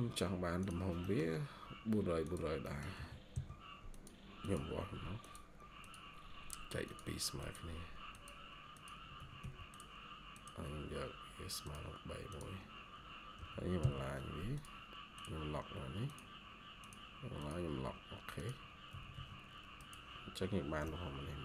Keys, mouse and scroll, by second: 0.9 middle click, 2.5 middle click, 2.9 typing, 9.1 Escape, 9.3 Escape, 13.3 typing, 18.8 Escape, 19.0 Escape.